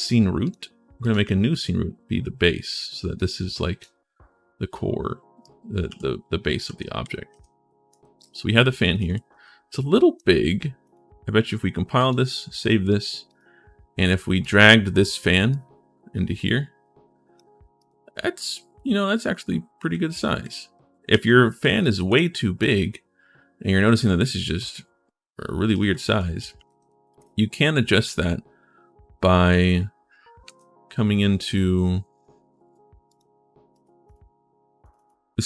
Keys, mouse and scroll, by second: 0.2 click, 0.8 click, 2.9 right click, 5.2-6.2 right drag, 5.4-9.7 typing, 9.1 right click, 10.6 right click, 11.8 click, 12.5 click, 13.1 click, 14.2 click, 15.3 click, 15.4-17.1 right drag, 17.4-18.5 typing, 17.6 right click, 19.7-22.3 typing, 21.3-22.4 right drag, 25.5-27.0 right drag, 25.6-27.1 typing, 30.2 ctrl+shift+s, 32.8 click, 33.5 click, 33.8 click, 34.6 click.